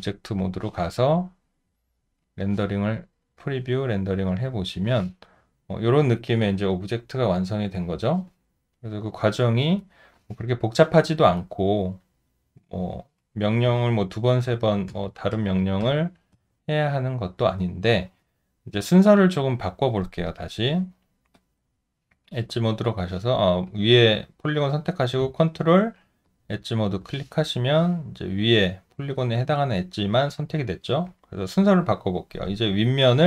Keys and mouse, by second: 1.0 alt+click, 1.9 alt+middle click, 11.4 alt+click, 12.4 alt+middle click, 14.4 ctrl+z, 26.2 ctrl+click, 30.3 alt+click.